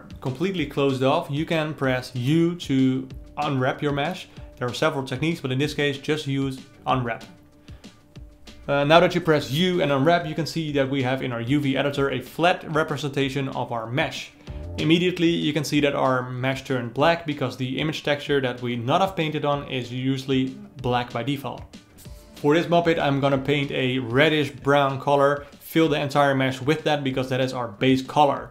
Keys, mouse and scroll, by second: 0.2 alt+click, 0.8 ctrl+e, 1.0 click, 1.1 ctrl+alt+middle click, 1.6 ctrl+click, 1.8 ctrl+e, 1.9 ctrl+alt+middle click, 2.1 a, 2.2 alt+middle click, 2.6 u, 2.9 a, 8.4 click, 10.9 ctrl+v, 14.8-17.1 drag, 17.1 ctrl+v, 22.2 ctrl+v, 24.1 click, 24.6 ctrl+v, 26.0-28.5 drag.